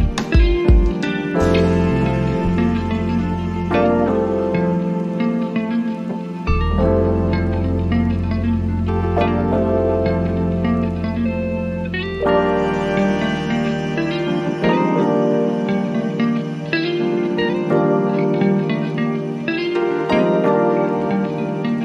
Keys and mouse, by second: 3.1 typing, 8.2 click, 8.2 typing, 15.4 click, 19.7 right click, 20.7 click.